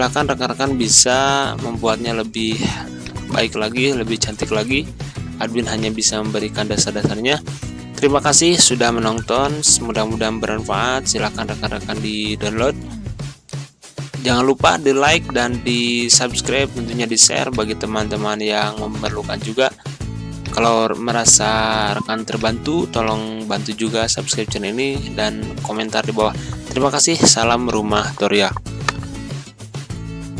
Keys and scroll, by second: 7.9 z, 26.4 z.